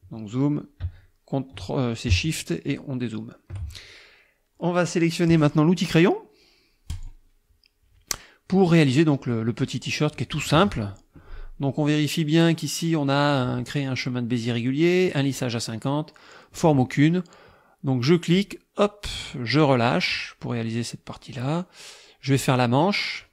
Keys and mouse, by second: 2.7 shift+click, 6.9 click, 9.0 click, 18.4-19.8 drag.